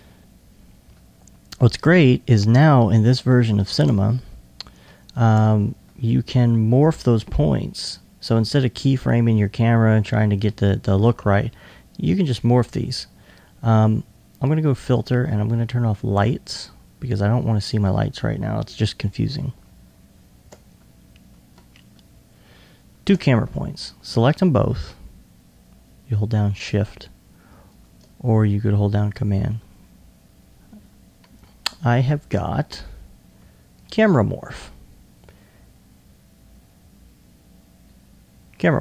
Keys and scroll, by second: 2.0 2, 6.8 alt+2, 8.0 2.